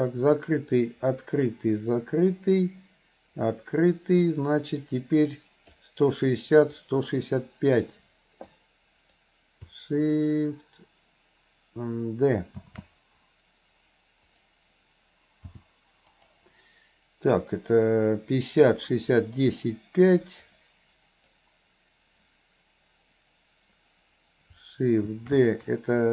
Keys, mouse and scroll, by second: 6.8-8.0 drag, 8.5-9.2 drag, 15.6 g, 20.6-21.4 drag.